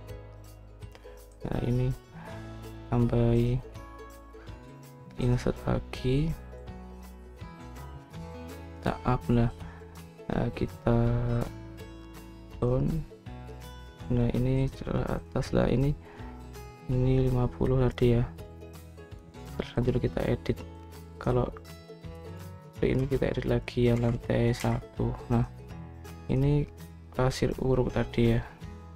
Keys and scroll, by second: 19.5-20.1 typing, 22.8-25.5 typing, 28.8-28.9 typing.